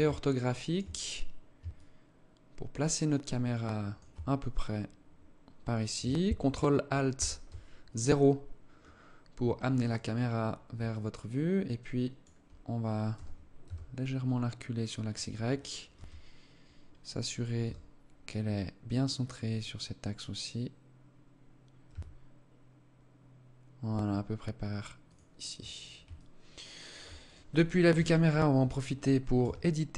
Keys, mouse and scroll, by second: 0.5 scroll up 5, 1.1 alt+shift+click, 6.5 ctrl+alt+KP_0, 8.8 Tab, 9.2 right click, 10.3 alt+click, 12.5 g, 15.3 KP_0, 17.1 g, 25.5 alt+click, 26.6 right click, 27.3 KP_0, 28.1 scroll up 1, 28.8 Tab.